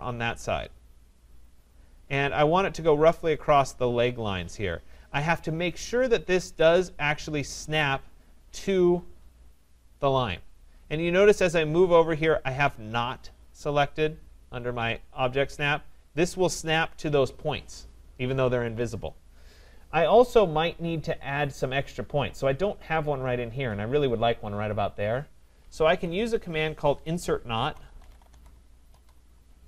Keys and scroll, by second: 25.8 Escape.